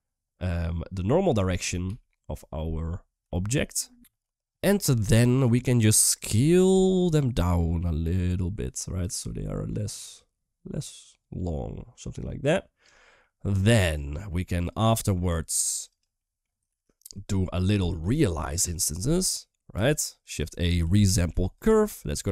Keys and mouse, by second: 0.6 click, 0.7 middle click, 1.6 KP_1, 3.1 shift+middle drag, 6.3 shift+middle click, 6.7 shift+click, 7.2-12.6 shift+drag, 13.1 middle click, 13.7 click, 14.5-16.6 typing, 14.7 middle click, 15.2 click, 19.1-20.1 typing.